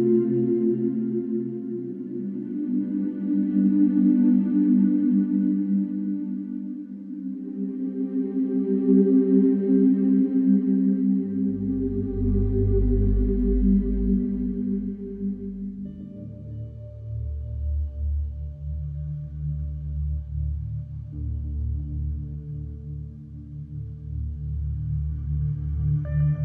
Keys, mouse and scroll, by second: 0.0 middle click, 0.1 middle click, 0.1 middle click, 0.6 middle click, 0.7 middle click, 0.7 middle click, 1.3 click, 2.3 click, 2.7-4.2 scroll, 5.7-6.4 scroll, 6.9-7.9 scroll, 8.6 click, 10.4 click, 10.8-11.3 scroll, 12.1 scroll, 12.4 scroll down 3, 12.4-12.9 scroll down 2, 12.9-13.5 scroll up 4, 14.6 middle click, 17.3-18.4 scroll, 22.2-23.2 scroll, 25.1 click.